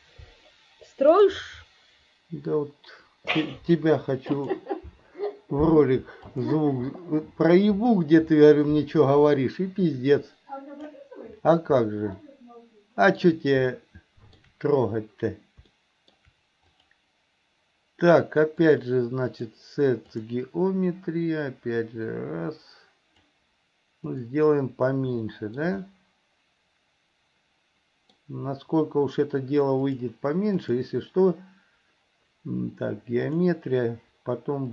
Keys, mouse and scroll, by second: 1.4-6.8 drag, 8.2-11.2 drag, 12.4-13.4 shift+middle drag, 14.0 shift+middle click, 16.0 shift+middle click, 18.7-20.5 drag, 21.8-23.5 drag, 24.2 click, 25.5 shift+middle click, 26.0-28.4 middle drag, 30.0-33.7 drag.